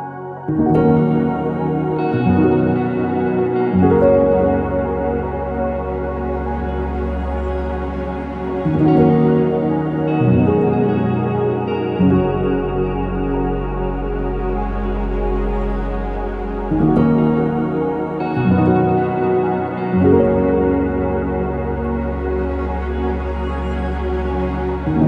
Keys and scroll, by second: 3.7 ctrl+c, 4.2 ctrl+v, 4.6 Return, 7.3-9.8 typing, 11.5 ctrl+z, 11.8 5, 12.0 Return, 12.0 5, 12.8 ctrl+z, 13.7 Escape, 13.8 Escape, 14.0 Return, 14.0 p, 16.8 ctrl+z, 17.4 Escape, 20.6-23.2 typing, 24.6 typing, 24.6 Return.